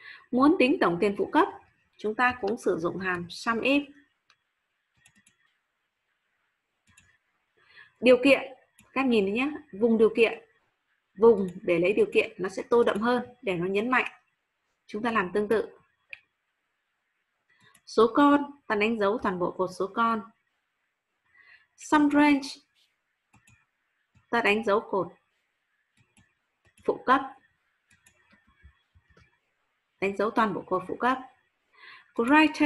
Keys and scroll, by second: 18.8 ctrl+shift+Down, 28.9 ctrl+shift+Down.